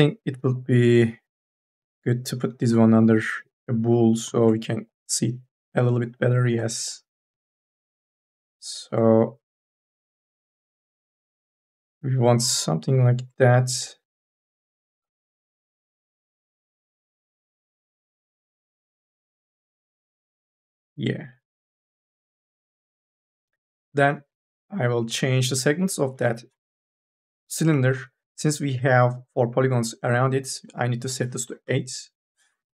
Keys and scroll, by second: 11.5 ctrl+z, 16.0 t, 16.8 e, 18.7 r, 19.5 e, 31.3 KP_8, 31.5 Return.